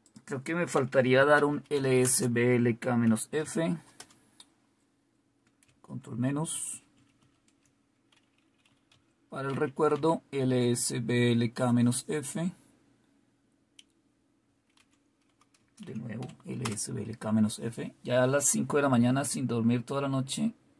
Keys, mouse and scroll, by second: 0.0 click, 0.7-3.3 typing, 3.9 Return, 6.2 ctrl+-, 6.6 ctrl+-, 7.0 ctrl+-, 7.2 ctrl+-, 8.6-11.1 typing, 14.7 Up, 15.6 space, 15.8 -, 16.2 f, 16.6 Return, 20.2 typing.